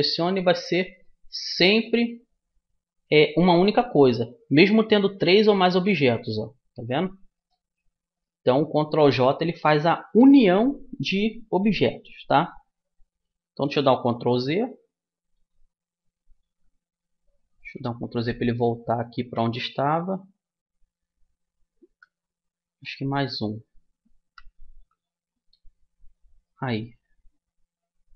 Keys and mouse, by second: 4.6-10.1 right drag, 14.1 ctrl+z, 15.3 ctrl+z, 26.1-28.1 drag.